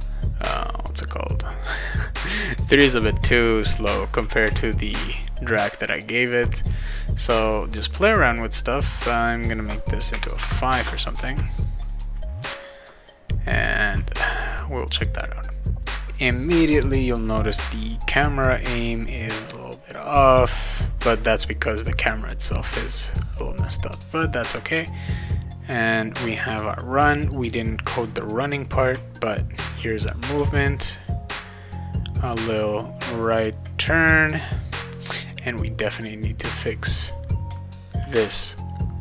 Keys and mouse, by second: 5.7 click, 7.3 click, 8.9 click, 9.0 click, 11.1 ctrl+s, 11.9 click, 13.7 click, 23.9 w, 30.3 d, 37.4 d.